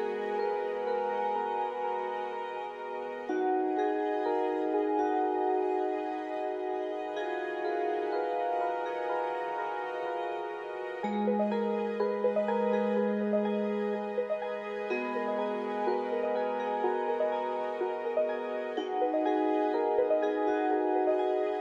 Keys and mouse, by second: 0.3 alt+z, 2.2 alt+z, 2.5-3.8 drag, 4.9-6.5 ctrl+z, 6.8 click, 8.0 g, 10.3 click, 10.9 g, 12.9 click, 13.3 g, 15.6-18.0 drag, 16.1 g, 19.6 3, 20.8 click.